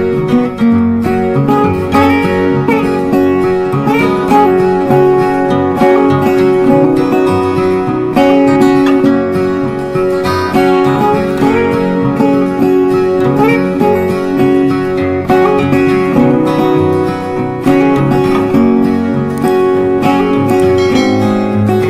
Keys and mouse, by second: 3.5 Up, 7.7 click, 9.2 Up, 12.2 click, 13.6 Up, 17.4 click, 18.7 Right.